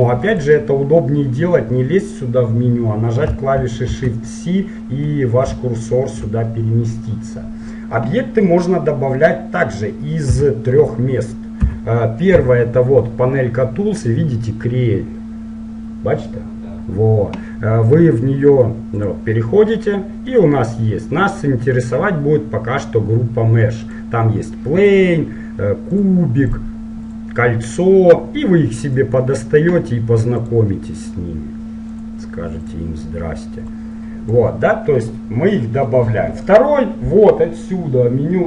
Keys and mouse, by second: 0.4-3.9 drag, 3.9 shift+c, 5.6 middle click, 10.4 n, 11.8 t, 19.1-21.0 drag, 23.9-29.0 drag, 24.0 typing, 25.9-27.8 typing, 29.0-35.3 drag, 35.3-38.4 middle drag.